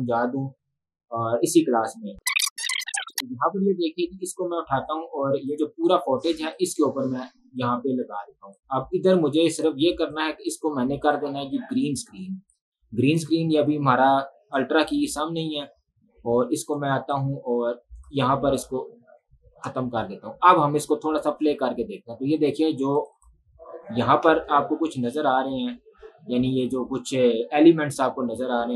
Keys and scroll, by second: 24.3 space.